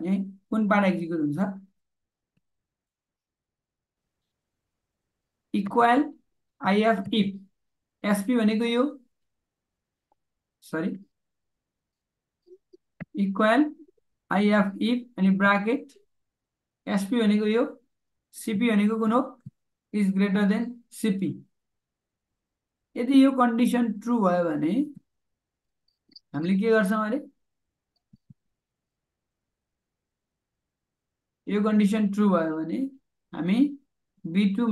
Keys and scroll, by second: 15.2 shift+9, 19.0 shift+..